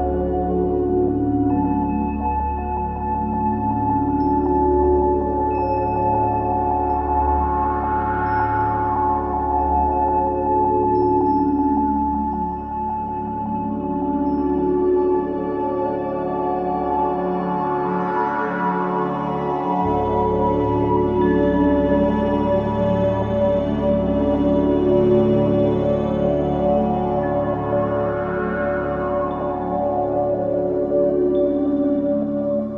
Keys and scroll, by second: 21.3 space, 23.2 space.